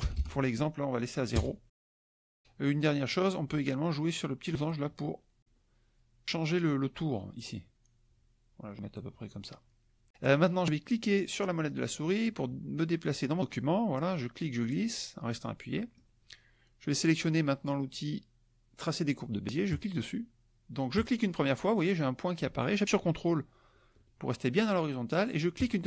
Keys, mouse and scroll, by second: 0.0 BackSpace, 1.3 KP_0, 1.7 Tab, 4.7 click, 7.3-9.1 drag, 12.0-16.1 drag, 19.7 click, 20.9 click, 25.5 ctrl+click.